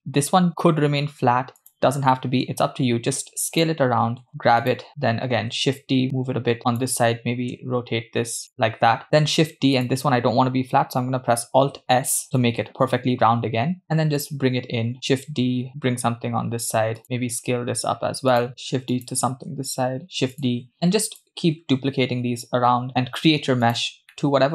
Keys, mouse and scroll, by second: 2.5 s, 4.6 g, 5.8 shift+d, 8.1 r, 9.8 shift+d, 12.1 alt+s, 13.8 g, 14.9 shift+d, 17.0 s, 19.0 shift+d, 19.4 shift+d, 20.8 shift+d, 22.8 shift+d, 24.1-24.5 middle drag.